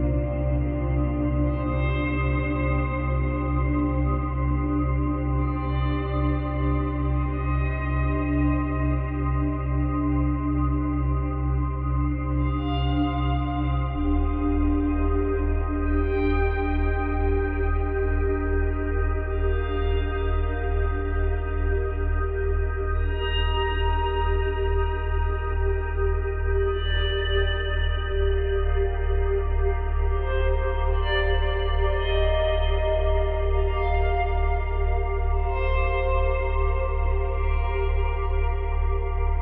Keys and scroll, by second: 0.5 space, 1.3 space, 2.7 space, 4.6 space, 5.2 space, 8.5 space, 33.7 space, 34.4 space.